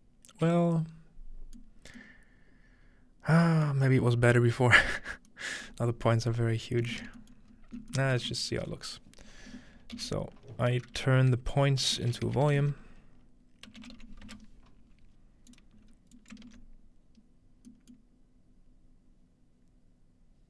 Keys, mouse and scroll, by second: 6.1-7.5 scroll down 3, 7.5-7.9 scroll up 2, 8.2 shift+a, 8.4-10.2 shift+drag, 8.4-10.2 scroll up 1, 10.2-14.8 typing, 15.5-18.3 drag, 15.9-17.2 scroll up 1, 17.2-18.1 scroll up 1, 19.3-20.4 middle drag.